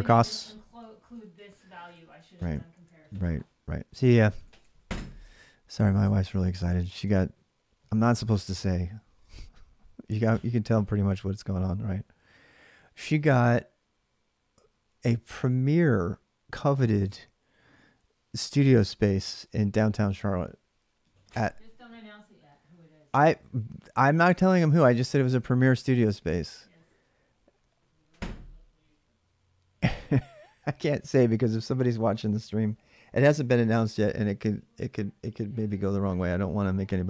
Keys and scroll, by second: 0.0 alt+Tab, 2.5 ctrl+a, 2.7 ctrl+a, 5.0 ctrl+[, 5.0 ctrl+j, 5.6-6.9 typing.